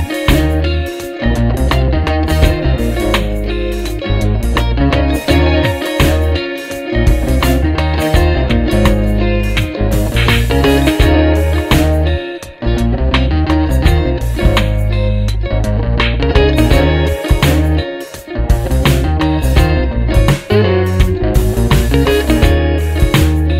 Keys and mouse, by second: 5.3 ctrl+alt+shift+e, 10.6 ctrl+-, 10.9 ctrl+-, 11.6 ctrl+-, 17.9 ctrl+=, 18.2 ctrl+=, 19.0 ctrl+=, 19.7 space.